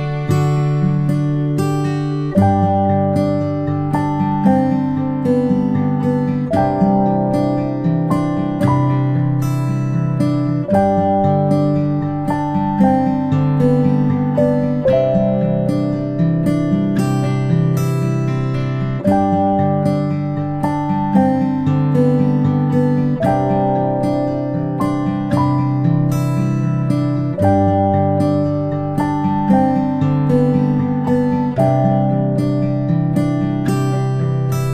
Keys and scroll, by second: 19.2 ctrl+p.